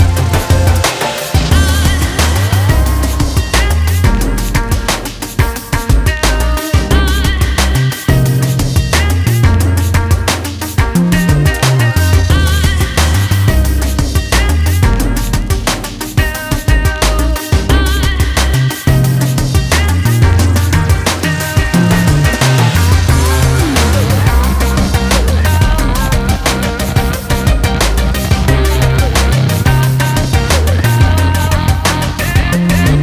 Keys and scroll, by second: 10.2 BackSpace, 10.8 BackSpace, 12.3 ctrl+z, 22.1 ctrl+Return, 23.0 ctrl+space, 23.6 ctrl+space.